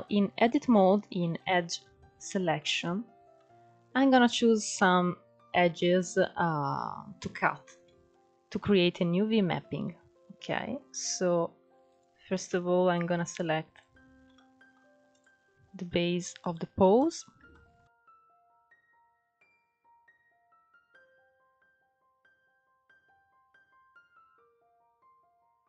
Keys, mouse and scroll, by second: 0.8 ctrl+2, 2.2-5.8 shift+middle drag, 6.5-6.8 scroll up 2, 6.8-7.8 shift+middle drag, 7.8-8.9 scroll up 1, 8.9 scroll up 1, 8.9 middle click, 9.7-10.5 scroll up 1, 10.5 alt+shift+click, 11.3 alt+shift+click, 11.9-13.1 middle drag, 13.1 alt+shift+click, 13.7 middle click, 14.5 alt+shift+click, 15.8 alt+shift+click, 16.4 alt+shift+click, 16.9-18.9 shift+middle drag, 18.9 alt+shift+click, 19.7 alt+shift+click, 20.4 alt+shift+click, 20.8 scroll down 1, 21.3 ctrl+z, 21.5-22.6 middle drag, 22.6 alt+shift+click, 24.8 alt+shift+click, 25.3 middle click.